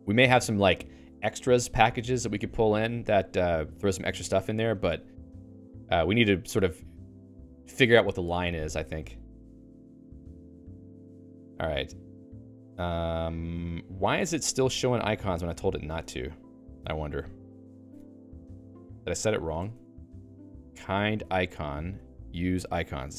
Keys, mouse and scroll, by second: 14.5 Escape, 16.0 alt+:, 16.2 Up, 17.4 Right, 18.1 Escape, 18.9 ctrl+g, 19.4-22.3 typing, 20.2 Escape, 22.3 ctrl+j.